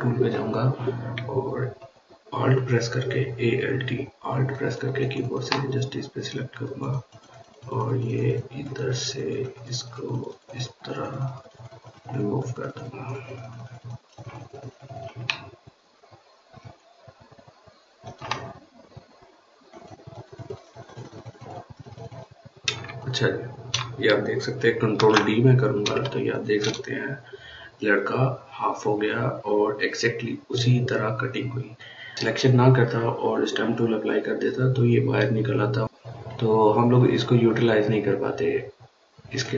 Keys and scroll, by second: 24.7 ctrl+d, 25.8 ctrl+space, 26.4 ctrl+space, 26.6 ctrl+space.